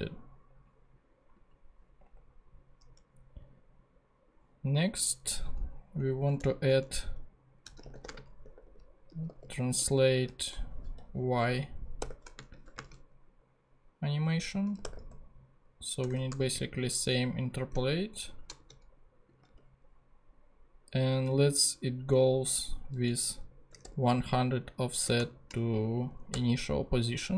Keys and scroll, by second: 6.0 Down, 6.2 Return, 7.4-10.6 typing, 12.0 shift+y, 12.4 shift+space, 12.6 =, 14.5-16.0 typing, 18.6 shift+super+c, 19.5 super+v, 23.4-24.3 typing, 25.0 shift+Right, 26.5 0.